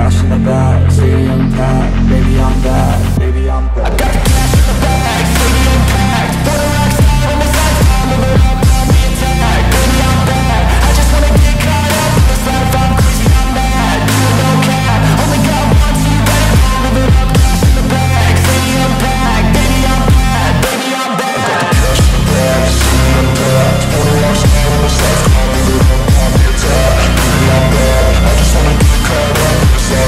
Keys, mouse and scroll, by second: 3.5-4.0 scroll up 3, 3.7 alt+middle click, 5.1-5.7 scroll down 1, 6.3-8.8 typing, 14.6 scroll down 1, 15.0 scroll up 1, 15.8 scroll down 1, 16.1 alt+click, 16.7 alt+middle click, 17.2-17.5 scroll down 1, 17.6 alt+middle click, 17.9-19.3 scroll up 1, 19.4 alt+click, 19.8 alt+middle click, 20.0 alt+click, 20.5 alt+middle click, 20.8-21.5 scroll down 1, 21.8-22.5 scroll up 1, 23.0 ctrl+z, 23.5-23.8 scroll down 1, 23.8 alt+middle click, 24.5-25.1 scroll down 1, 25.2 alt+middle click, 25.4-26.1 alt+scroll up 2, 26.1-27.0 scroll up 3, 26.2 alt+middle click, 29.0 ctrl+z, 29.7 scroll down 1, 29.9 alt+middle click.